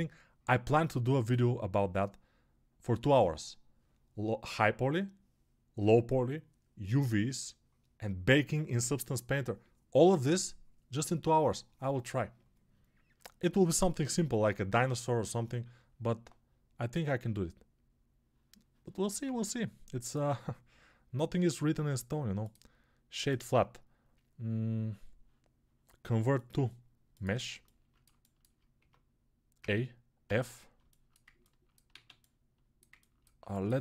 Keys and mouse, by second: 1.7-33.8 right drag, 19.1 ctrl+Tab, 28.6 Tab, 29.4 a, 30.1 f, 31.7 alt+z.